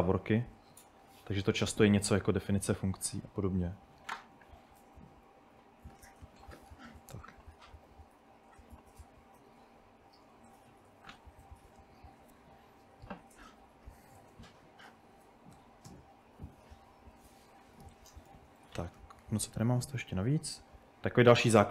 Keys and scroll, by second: 0.0-6.5 typing, 17.9 super+Tab, 18.2 super+Tab.